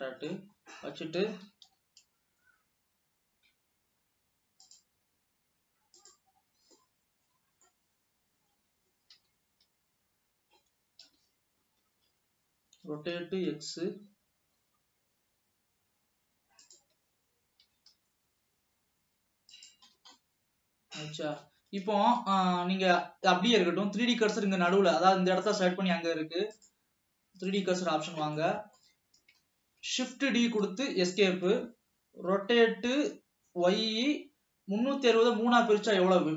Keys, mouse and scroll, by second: 0.2-0.7 scroll down 2, 0.3 middle click, 1.8 g, 6.1 click, 6.5 scroll down 2, 7.1-8.7 middle drag, 8.7 l, 9.5 l, 10.0 l, 11.1 KP_3, 13.3 r, 17.8 g, 20.1-20.5 scroll down 2, 20.5-21.8 middle drag, 21.8 ctrl+s, 22.2 scroll up 1, 22.8 scroll up 1, 25.0-27.1 middle drag, 27.1-28.3 drag, 28.3 scroll down 1, 28.5-30.3 middle drag, 30.3 shift+d, 32.5 r.